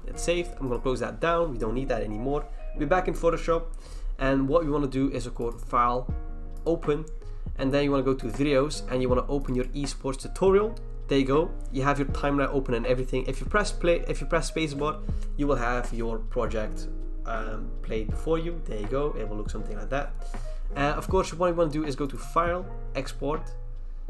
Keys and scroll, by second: 0.0-2.9 typing.